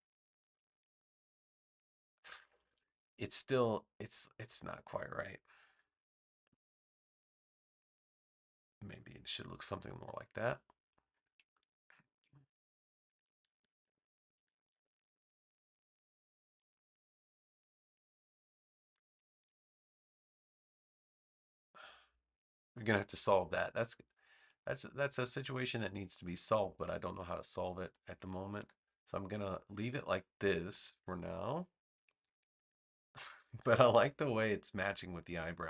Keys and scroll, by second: 2.3 super+=, 13.3 super+z, 28.5 BackSpace.